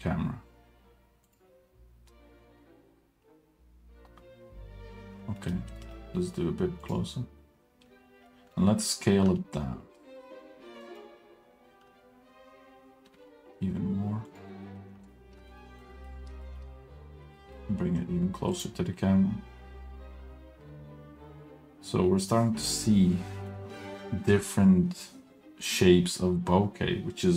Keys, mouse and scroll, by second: 5.4 middle click, 5.7 g, 8.3 middle drag, 9.2 s, 13.1 s, 14.8-15.3 middle drag, 15.6 shift+middle click, 15.9 middle click, 16.1 scroll up 1, 16.4 shift+middle drag, 17.2 g.